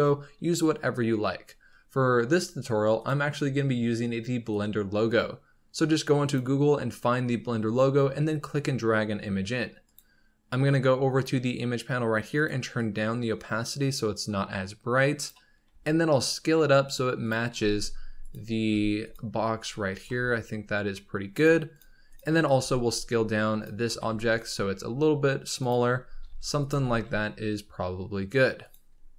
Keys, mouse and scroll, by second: 9.8 click, 12.2-15.6 drag, 15.6 s, 17.5 g, 18.5 s, 19.5-19.9 scroll down 1, 19.9 g, 21.6 click, 22.0 click, 22.4 s, 23.8 g, 25.8 scroll up 2, 26.1 s, 26.6 g.